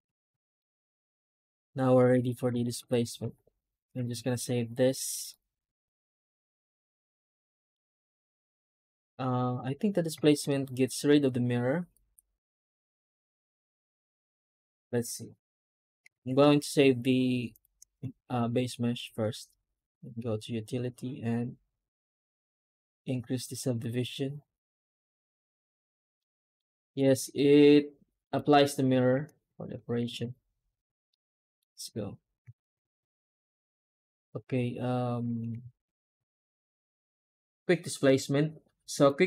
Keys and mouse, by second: 0.2 1, 0.4-1.8 middle drag, 2.0 a, 2.5 shift+middle click, 3.2 ctrl+shift+s, 7.0 alt+middle click, 7.7 a, 8.1 Tab, 25.4 click, 25.7 Tab, 26.0 middle click, 26.9 ctrl+space, 29.0 ctrl+space, 30.0 ctrl+z, 31.0-31.5 alt+middle drag, 31.6 Tab, 34.2-35.0 right drag, 35.1 Tab, 35.5 a, 35.7 Tab.